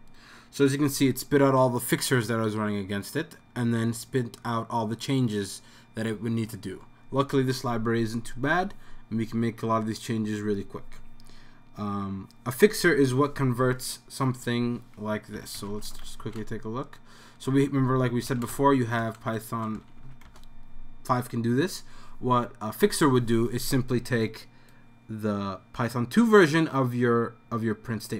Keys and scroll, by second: 15.1-20.5 typing.